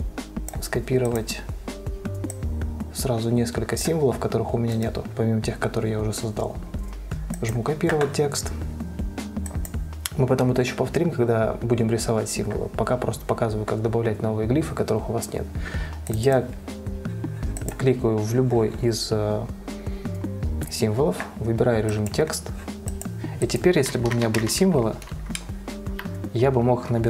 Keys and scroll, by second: 24.2-25.5 typing.